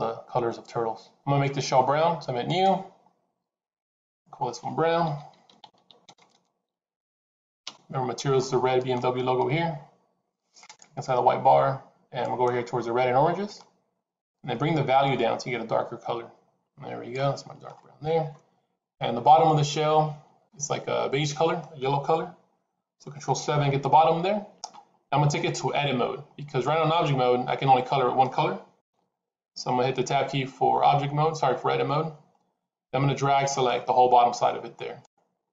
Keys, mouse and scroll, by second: 2.4 click, 3.9 click, 6.1 BackSpace, 10.5 click, 18.9 middle click, 23.1 ctrl+KP_7, 26.5 middle click, 28.7 ctrl+KP_7, 30.6 Tab, 33.5 click, 35.4 middle click.